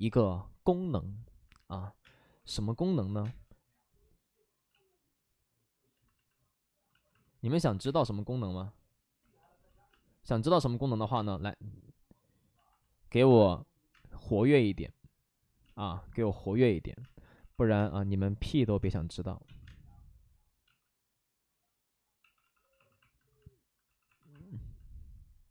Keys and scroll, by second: 2.0-3.2 typing, 4.6 ctrl+z, 6.8 ctrl+z, 7.8 space, 9.6 ctrl+z, 9.9 space, 10.8 ctrl+z, 11.1 space, 13.9 space, 15.6-17.7 typing, 18.8 space, 19.4 ctrl+z, 19.6 space, 20.6 ctrl+z, 22.2 d, 22.4 d, 22.6 d, 22.7 d, 23.8 d.